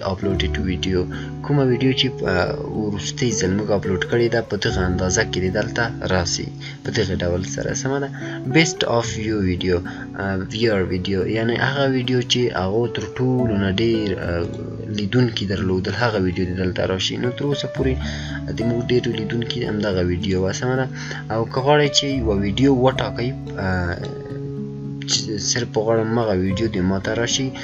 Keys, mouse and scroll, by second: 11.9 scroll up 1, 12.0-12.3 scroll down 1, 14.4 click, 20.1 click, 20.2 click, 23.4-27.6 drag.